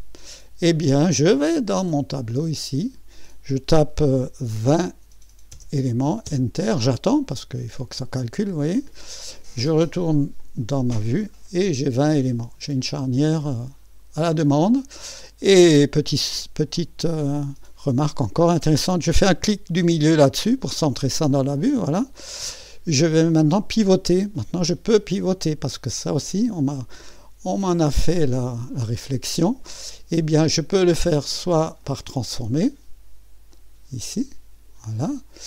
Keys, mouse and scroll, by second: 1.9 click, 3.1-4.9 drag, 4.6-5.5 typing, 6.3 Return, 10.4 click, 12.2-12.8 scroll up 1, 12.8 click, 13.6 click, 13.6-14.1 scroll up 1, 16.7-18.6 right drag, 17.7-18.6 scroll up 1, 20.4 middle click, 21.3-23.2 drag, 22.7-23.2 scroll up 1, 25.9 click, 28.3 click, 30.8 right click, 31.9 click, 33.5-34.8 drag.